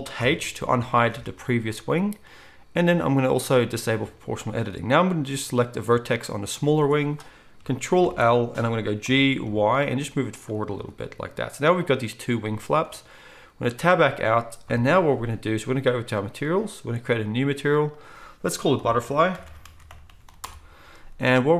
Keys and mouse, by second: 0.2 alt+h, 1.1 alt+a, 8.0 ctrl+l, 9.0 g, 10.8 alt+a, 13.7 Tab, 14.6 KP_1, 17.6-21.5 drag.